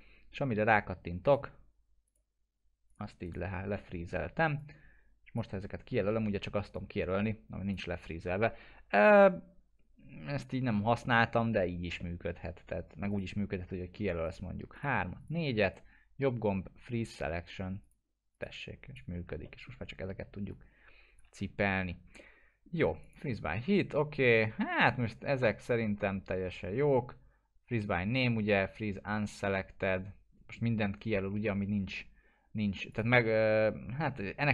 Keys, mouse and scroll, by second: 1.2 click, 3.2 right click, 3.8 alt+middle click, 4.2 scroll down 1, 4.6-5.5 drag, 6.1 w, 6.7-8.0 drag, 8.2 ctrl+z, 11.0 alt+middle click, 11.6 scroll up 1, 12.0 middle click, 13.1 click, 14.2 ctrl+click, 15.6 right click, 17.8 click, 19.4 alt+middle click, 20.5-21.4 click, 21.6 ctrl+z, 22.2-22.8 alt+middle click, 23.0 click, 32.9 click, 33.2 middle click.